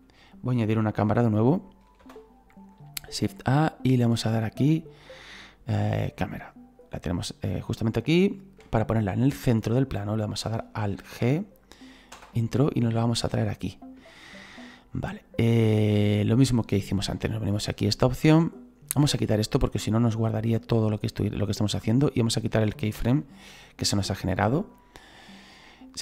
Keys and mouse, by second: 5.8 click, 8.6 middle click, 10.9 alt+g, 12.1 Return, 13.1 click, 14.1 middle click, 17.4 click, 19.9 click, 21.9 right click, 23.0 Delete, 23.4 click.